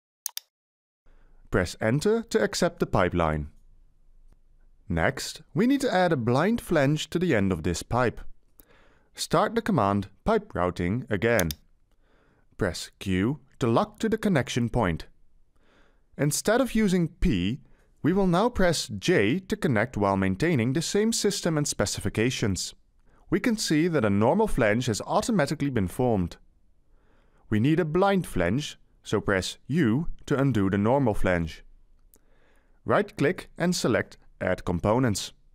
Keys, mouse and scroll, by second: 2.3 Return, 12.7 q, 23.3 j, 30.9 u.